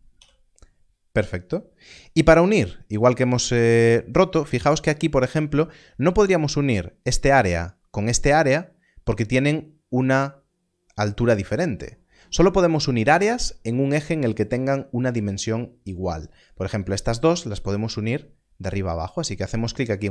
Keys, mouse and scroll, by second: 0.1 click.